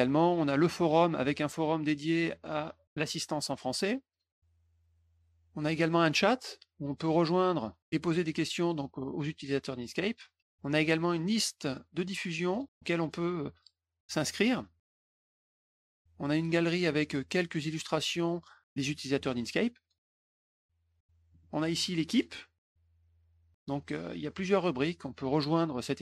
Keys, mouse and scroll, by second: 0.8 middle click, 0.9 scroll down 1, 1.7 click, 4.0 click, 5.8 middle click, 6.8 click, 9.9 click, 11.6 middle click, 12.5 click, 14.9 click, 16.2 middle click, 17.2 click, 21.2 middle click, 22.1 click.